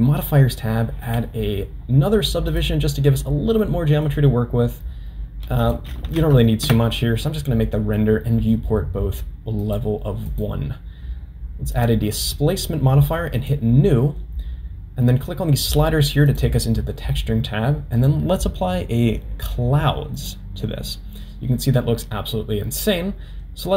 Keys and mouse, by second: 1.1-2.8 drag, 3.6-4.1 middle drag, 5.7-7.4 drag, 9.6 click, 10.3-12.0 drag, 13.4 click, 18.0-20.4 drag.